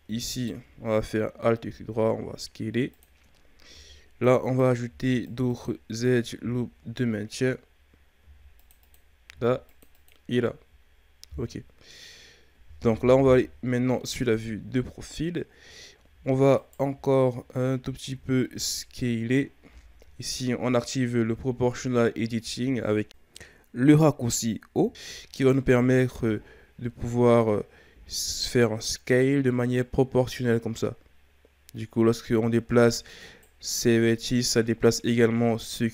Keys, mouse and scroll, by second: 0.3 alt+right click, 1.6 s, 3.7 ctrl+r, 4.8 ctrl+r, 6.4 z, 7.1-8.2 scroll up 3, 8.2 ctrl+r, 9.3 ctrl+r, 13.2 KP_3, 14.3-15.6 ctrl+scroll up 6, 15.6-16.6 scroll down 2, 16.6 alt+right click, 18.0 z, 18.6 z, 23.1 o, 24.5-25.3 shift+scroll up 1, 25.3 alt+right click, 26.1 s.